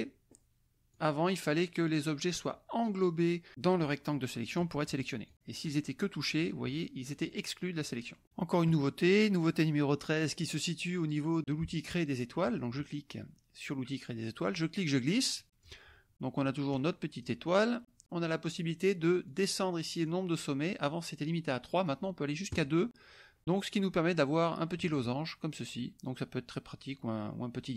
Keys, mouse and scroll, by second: 0.9-4.7 drag, 5.2 click, 7.8 click, 12.4 click, 14.4-15.8 drag, 16.7 right click, 17.1 click, 19.3 click, 20.0 click, 22.5 click, 24.4-27.7 drag.